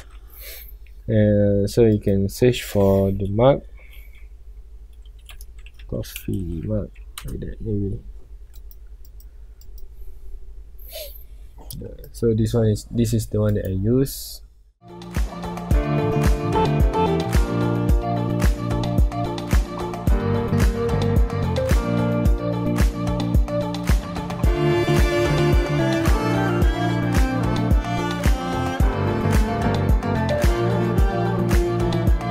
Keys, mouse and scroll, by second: 0.0-7.2 middle drag, 7.2 e, 7.4 Return, 9.7-12.8 drag, 15.5 click, 15.9 scroll down 1, 16.4 scroll up 1, 16.6 scroll down 1, 16.9 x, 17.2 scroll up 1, 17.3 click, 17.5 alt+r, 17.9 KP_Decimal, 18.1 scroll down 1, 18.2-18.6 middle drag, 18.6 click, 18.8 g, 19.3 middle click, 19.5 g, 20.8 scroll down 1, 21.0 g, 22.6-22.9 middle drag, 22.9 alt+a, 22.9 middle click, 23.0 scroll up 1, 23.3 click, 23.4 shift+click, 24.7 ctrl+j, 25.0 click, 25.6 alt+g, 25.7 KP_Decimal, 25.9 scroll down 1, 25.9 middle click, 26.0 scroll up 1, 26.7 right click, 27.3 alt+g, 27.3 KP_Decimal, 27.7 middle click, 27.9 r, 28.7-29.0 middle drag, 29.0 alt+g, 29.5-32.3 typing, 29.9 click, 30.1 scroll up 1, 30.4 scroll down 1, 30.5 middle click, 31.1 click, 31.1 middle click, 31.5 click.